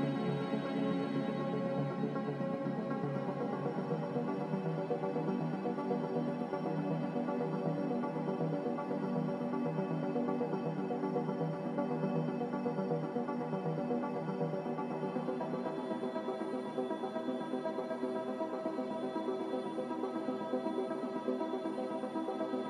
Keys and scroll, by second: 0.5 ctrl+z, 1.0 ctrl+z, 2.1 ctrl+z, 2.6 ctrl+z, 3.1 ctrl+z, 4.1 ctrl+z, 4.6 ctrl+z, 10.4 z, 16.4-20.2 typing.